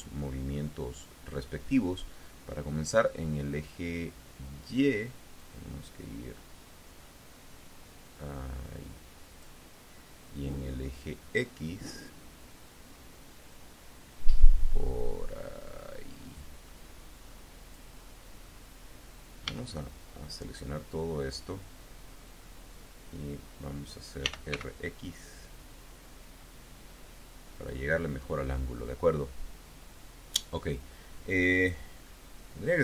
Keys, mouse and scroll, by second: 5.3-9.5 drag, 11.3-17.8 drag, 19.3 a, 24.1 r, 24.3 x, 27.4 click, 31.3-31.9 scroll up 2, 32.7-32.8 scroll up 10.